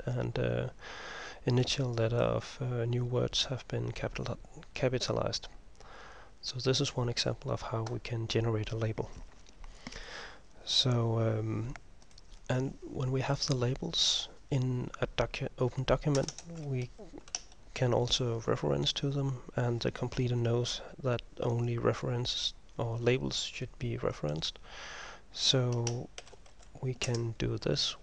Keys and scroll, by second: 16.3 Return, 16.5 Return, 26.3-26.7 typing.